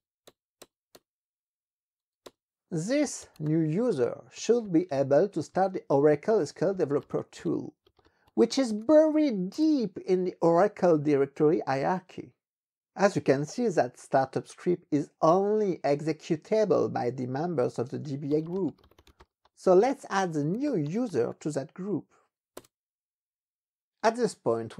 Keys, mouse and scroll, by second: 0.5 Return, 2.2 Return, 2.8-9.5 typing, 5.3 Tab, 6.0 Tab, 6.2 Tab, 9.6 Return, 17.8-21.7 typing, 22.6 Return.